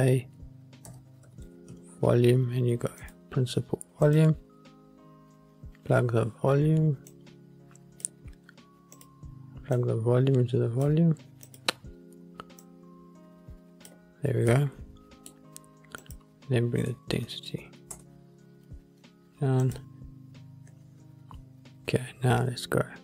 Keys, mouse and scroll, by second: 5.2-7.2 scroll down 1, 7.2-9.2 drag, 9.9-11.7 drag, 12.7-14.0 drag, 14.7 middle click, 16.2-18.1 drag, 19.9 click.